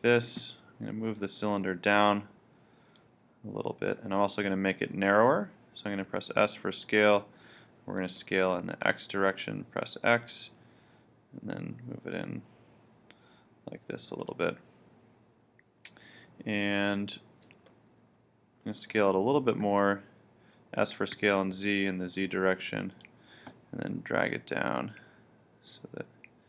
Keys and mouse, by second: 6.1 s, 14.3-16.1 drag, 19.7 s, 23.0-26.1 drag.